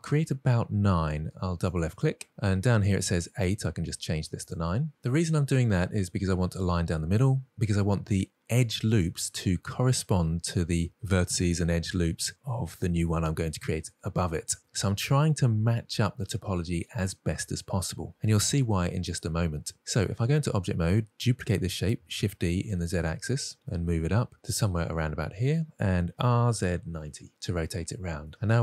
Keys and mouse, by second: 1.1 click, 3.8 click, 5.3-6.3 middle drag, 20.2 Tab, 22.0 shift+d, 22.3 g, 22.4 z, 24.0-25.3 middle drag, 25.8 r, 26.1 z, 26.5 9, 27.0 Return, 27.0 0, 27.9-28.6 middle drag.